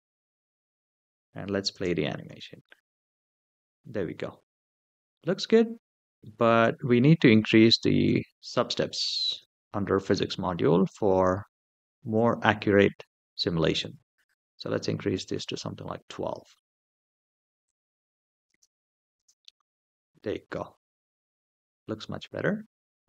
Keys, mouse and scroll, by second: 1.5 space, 2.0 space, 2.4-2.9 middle drag, 3.3-4.1 scroll up 3, 4.1-6.0 middle drag, 6.4 scroll down 1, 7.0 middle drag, 7.6 shift+middle drag, 9.1 click, 11.9 click, 13.6-15.4 drag, 17.4 click, 18.3 space, 18.9 space, 19.2-19.9 middle drag, 20.3 scroll up 3, 20.8-22.0 middle drag.